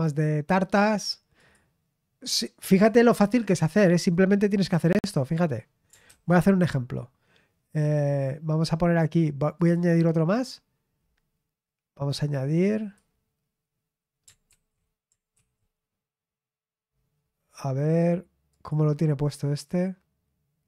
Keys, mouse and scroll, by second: 1.4 click, 2.7 click, 5.0-6.2 drag, 6.0 ctrl+c, 9.5 click, 12.7 click, 14.4 ctrl+v, 15.3 ctrl+z, 18.4 click.